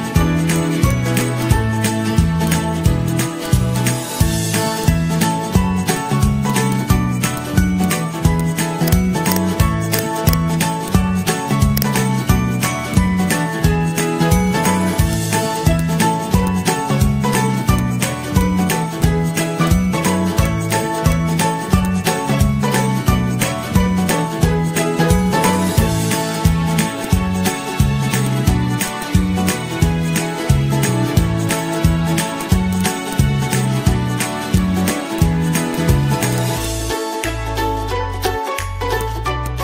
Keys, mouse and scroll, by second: 4.3 Up, 5.2 Up, 5.2 ctrl+-, 5.5 ctrl+-, 11.1 ctrl+a, 11.9-12.8 typing, 16.8 ctrl+x, 23.0 ctrl+v, 23.6 ctrl+a, 24.3-26.0 typing, 27.2 Return, 27.6 ctrl+a, 31.6-32.5 typing, 33.3 Return, 33.7 Return, 37.1 Delete, 37.4 Delete.